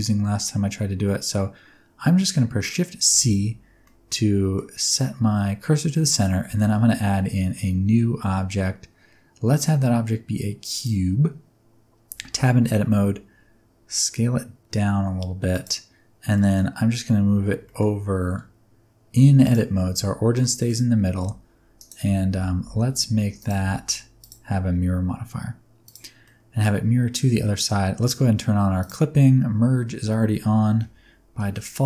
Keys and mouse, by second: 3.0 shift+c, 3.8 middle click, 6.0 middle click, 6.5 shift+a, 12.0 Tab, 12.3 s, 15.4 click, 16.4 middle click, 17.3 g, 17.6 middle click, 19.4 click, 19.6 Tab, 20.3 middle click, 21.1 g, 21.7 click, 22.0 Tab, 22.3 a, 22.6 g, 22.8 z, 23.3 click, 23.5 Tab, 24.3-25.8 drag, 26.2 middle click, 28.7 click, 30.6 KP_1, 30.7 KP_3, 31.3 KP_1.